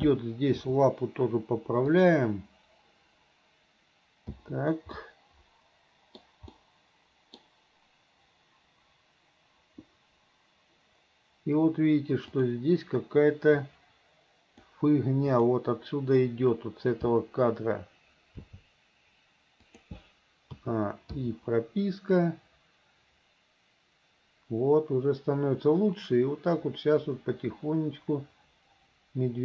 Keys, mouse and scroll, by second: 0.6 r, 4.4 i, 5.0-6.2 middle drag, 6.6 middle click, 12.3 click, 13.6-14.7 drag, 15.3 click, 18.4 g, 20.6 a, 21.2 i, 22.2-29.4 drag.